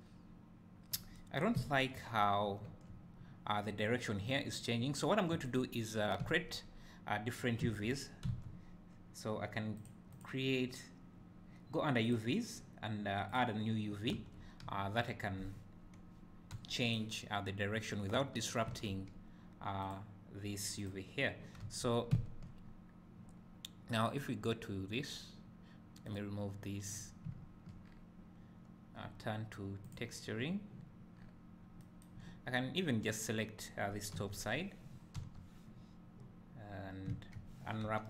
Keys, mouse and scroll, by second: 6.4 `, 6.7 scroll down 2, 7.1-7.4 scroll up 1, 7.7 Tab, 13.3 click, 14.2 Tab, 18.2 u, 18.7 Tab, 19.8 click, 20.8 click, 21.6 Tab, 22.1 `, 22.6 scroll up 1, 24.1 click, 26.1-27.0 drag, 27.0 scroll up 2, 28.0 scroll down 1, 29.9 click, 30.4 scroll up 1, 32.4 scroll down 1, 33.2 click, 34.2 3, 34.3 click, 35.2 l, 36.7 scroll down 1, 37.2 `.